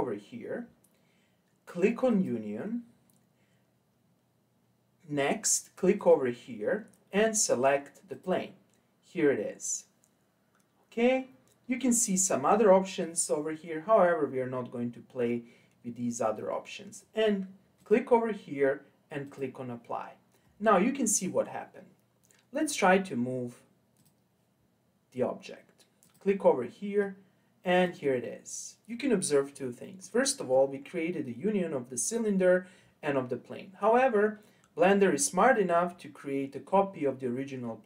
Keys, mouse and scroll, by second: 2.1 click, 6.0 click, 12.2-15.2 drag, 17.8-20.8 drag, 24.0-26.1 drag, 27.0 click, 30.0-33.1 middle drag.